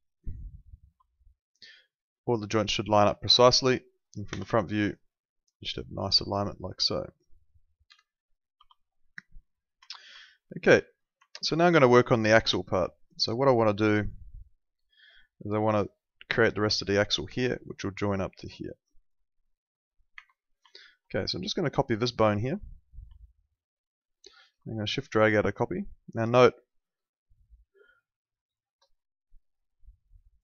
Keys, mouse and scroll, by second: 0.9 F3, 3.2 middle click, 4.3 f, 7.9 p, 8.6 F3, 9.1 alt+middle click, 9.9 alt+middle click, 10.8 alt+middle click, 12.4 alt+middle click, 15.1 ctrl+2, 20.1 Escape, 20.7 alt+middle click, 21.9 click, 22.3 alt+middle click, 23.2 alt+middle click, 24.7 shift+click, 28.5 ctrl+shift+2, 30.3 click.